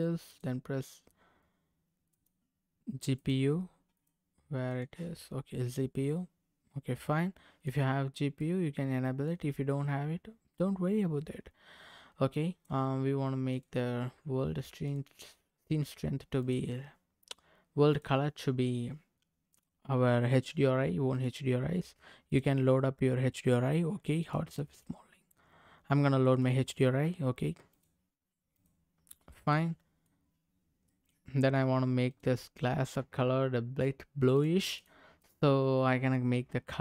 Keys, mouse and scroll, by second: 1.4 click, 3.2 click, 4.0 click, 5.3 scroll down 1, 5.6-7.6 middle drag, 8.0 scroll down 1, 8.3 middle click, 9.6-11.0 scroll down 2, 12.3 click, 13.5 click, 14.8 click, 16.4 click, 17.9-19.6 drag, 21.1 click, 29.2-29.5 scroll up 1, 29.5 middle click, 30.8 middle click, 31.3-31.6 scroll up 2, 32.1 click, 34.3 click, 34.8 click, 35.2 click.